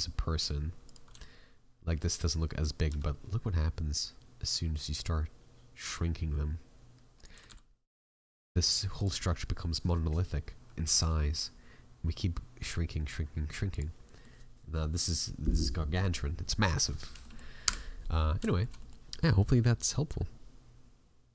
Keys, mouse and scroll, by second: 14.2 middle click, 16.2 scroll up 3, 16.5 middle click, 16.8-17.2 scroll down 6, 17.2 middle click, 17.6 Delete, 18.5 shift+middle click, 18.7 middle click.